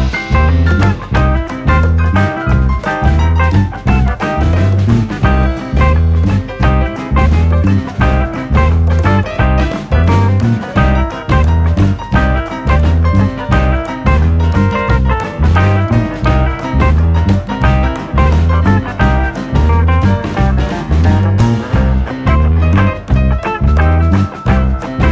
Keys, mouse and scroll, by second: 0.8 shift+middle drag, 1.0 click, 1.1 right click, 1.5 click, 1.7-3.4 middle drag, 3.4-4.4 drag, 5.0-6.0 drag, 6.0 Tab, 6.4 s, 7.2 Tab, 8.0 Tab, 8.3 click, 9.0 Tab, 9.3 KP_3, 9.5 scroll up 1, 9.8 s, 10.5 s, 11.6-12.5 drag, 13.3 scroll up 2, 13.6 scroll down 2, 13.7-14.4 middle drag, 14.4 KP_3, 14.6 scroll up 1, 14.8-15.5 shift+middle drag, 15.5 s, 17.5 Tab, 18.3 a, 18.8 g, 20.0 Tab, 20.4 click, 21.1 ctrl+a, 21.8 click, 22.4 click, 22.8-23.2 scroll down 5, 23.2 scroll up 1, 23.5 click, 23.7 KP_Decimal, 24.0 scroll down 3, 24.3 shift+middle click, 24.7 Tab.